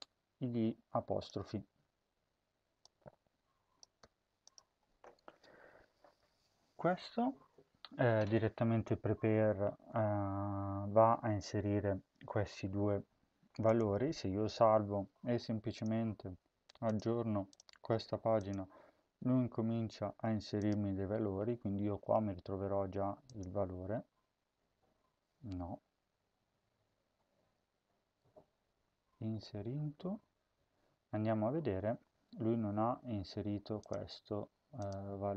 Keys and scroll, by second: 1.8 [, 3.9 [, 13.9 ctrl+s.